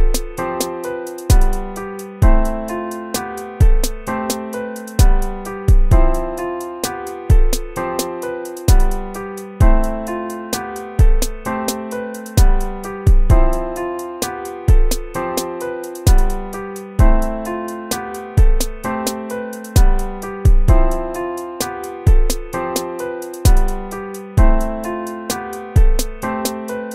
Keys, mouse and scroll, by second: 0.5 ctrl+z, 21.7 ctrl++.